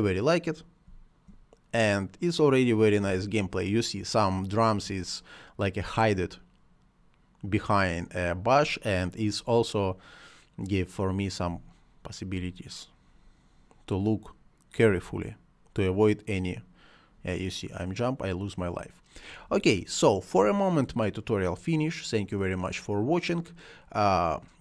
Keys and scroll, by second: 0.8 space, 2.9 space, 11.4 space, 14.7 space.